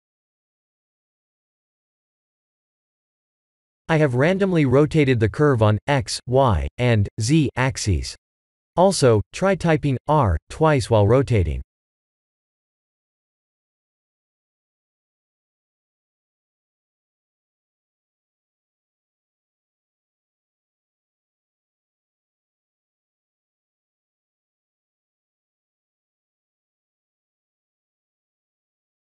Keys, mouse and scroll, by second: 1.3 middle click, 3.0 r, 5.0 r, 7.1 middle click, 9.6 s, 11.4-12.7 scroll down 2, 12.7-13.8 scroll down 2, 13.8 g, 23.6 middle click, 29.0 middle click.